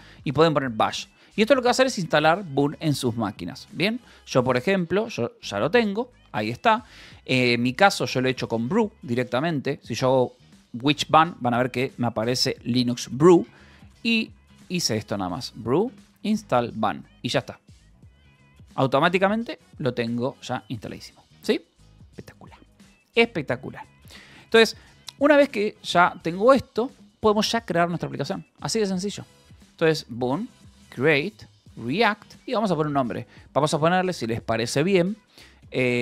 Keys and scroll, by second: 0.0-1.6 typing, 4.4 b, 4.9 =, 5.2 v, 5.5 Return, 8.8-10.3 typing, 10.5 Return, 13.2-17.3 typing, 19.5 BackSpace, 22.1 ctrl+u, 30.1-32.6 typing.